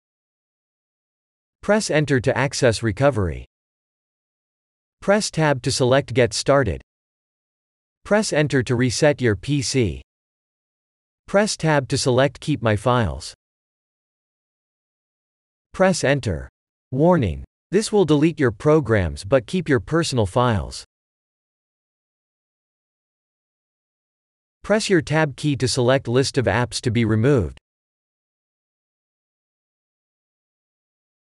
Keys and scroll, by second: 11.0 Tab.